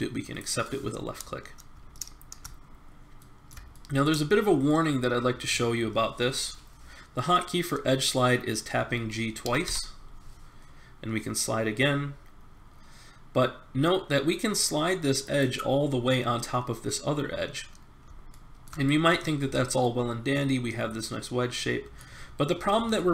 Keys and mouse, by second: 1.9-6.6 middle drag, 9.4 g, 18.3 middle click, 21.6-22.9 middle drag.